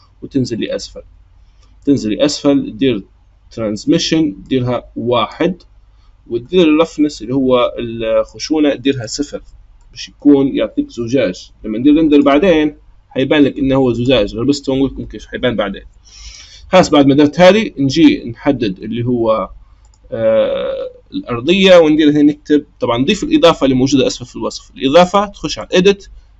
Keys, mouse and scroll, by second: 0.0-4.4 scroll down 15, 4.4-5.8 drag, 5.8-8.3 scroll up 2, 8.3-9.7 drag, 9.7-12.3 middle drag, 12.3 click, 14.0 click, 19.8 click, 21.6-24.8 drag, 25.5-26.3 drag.